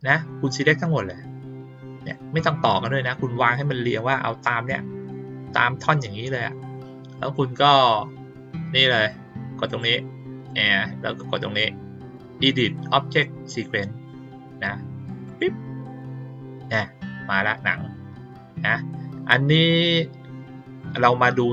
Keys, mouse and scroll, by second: 0.8-2.0 drag, 9.6 click, 15.2 click.